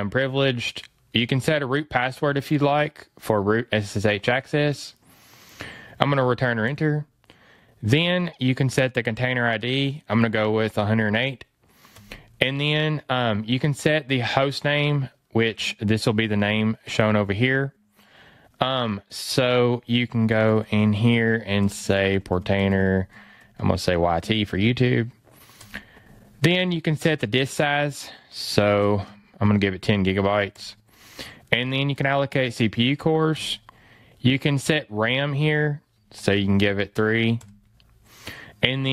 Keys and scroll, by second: 20.3 BackSpace, 28.8 BackSpace, 35.1 fn+Left, 36.3 BackSpace.